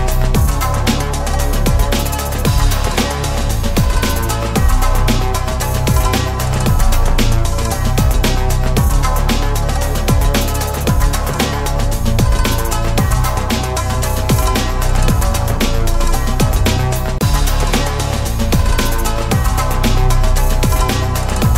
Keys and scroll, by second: 3.0 ctrl+z, 7.7 ctrl+BackSpace, 9.1 ctrl+a.